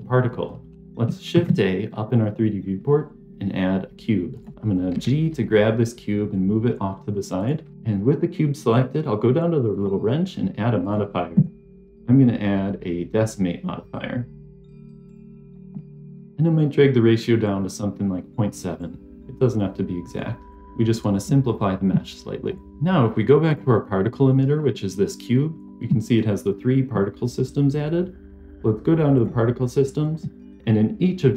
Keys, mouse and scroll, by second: 1.2 shift+a, 4.9 g, 9.6 click, 10.7-15.2 drag, 16.6-20.5 drag, 22.4 middle click, 22.7 click, 23.4 click, 29.1 click.